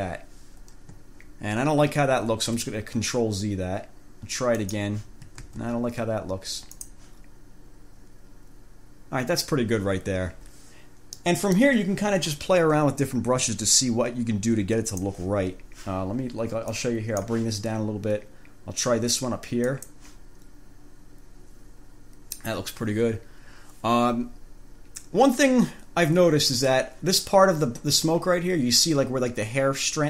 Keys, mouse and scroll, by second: 2.5 ctrl+z, 4.8 click, 5.7 ctrl+z, 7.0 click, 11.4 click, 13.0 scroll up 2, 13.5 scroll up 1, 15.1 click, 16.9 click, 19.8 click.